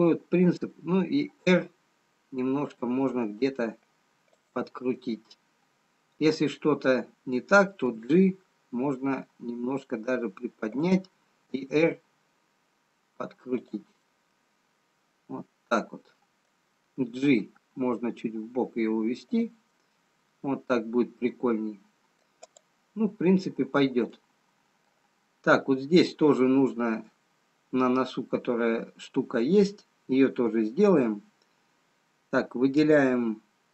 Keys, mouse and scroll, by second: 2.5 r, 5.7 middle click, 7.9 g, 11.5 r, 17.2 g, 20.1 middle click, 23.4 click, 24.6 middle click, 25.6 scroll up 2.